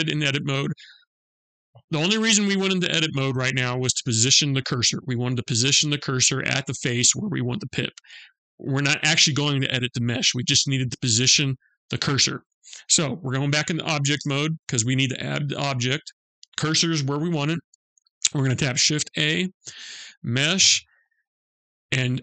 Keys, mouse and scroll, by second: 13.7 Tab, 18.8 shift+a.